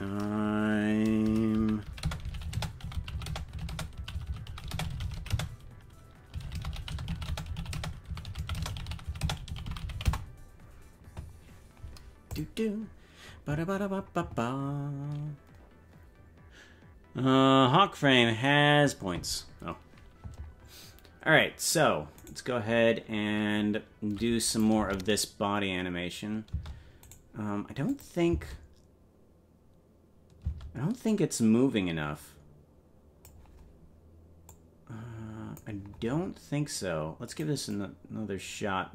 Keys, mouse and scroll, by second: 22.4 right click, 24.5 click, 24.8 space, 27.0 space, 27.1 right click, 27.9 click, 28.3 space, 31.1-33.3 drag, 31.1 space, 34.5-35.6 drag, 37.3 click, 37.7-38.9 drag.